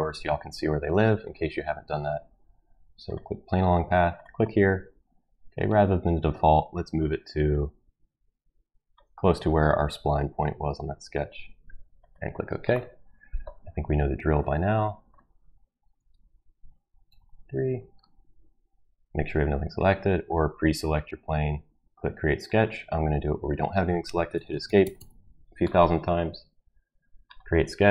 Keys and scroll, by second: 15.8 ctrl+v, 16.9 BackSpace, 17.1 Return, 24.1 Escape, 24.3 Escape, 24.5 Escape, 24.6 Escape, 24.8 Escape, 24.9 Escape.